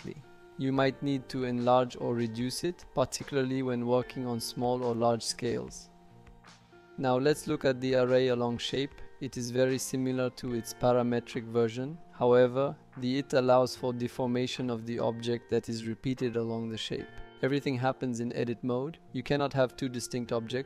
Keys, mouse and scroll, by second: 3.1-5.5 shift+drag, 7.3 click, 15.2 click, 16.0 click, 16.8 click.